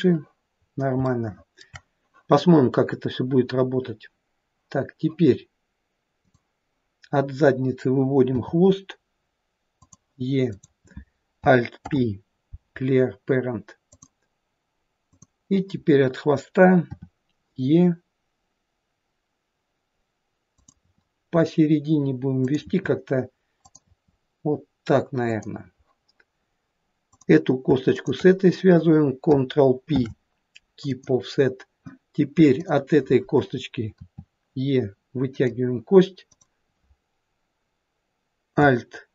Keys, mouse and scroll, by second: 0.7-1.0 scroll up 2, 1.1 shift+middle click, 1.7 shift+middle click, 6.2 click, 8.4 e, 10.5 click, 11.8 alt+p, 15.1 click, 17.0 e, 20.9 e, 22.7 e, 27.1 click, 28.0 shift+click, 29.9 ctrl+p, 32.6 click, 34.0 e, 36.3 click.